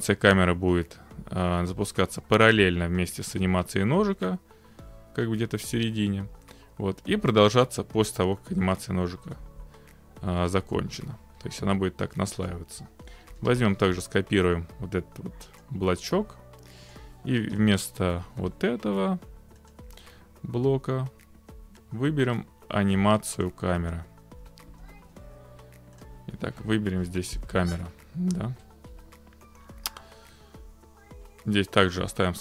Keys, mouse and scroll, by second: 8.7 middle click, 12.5 click, 13.4 ctrl+c, 15.6-16.8 drag, 17.0 click, 17.6 Delete, 19.7-20.9 drag, 23.0 click, 23.5 click, 24.5-25.4 typing, 26.0 click, 28.4 middle click.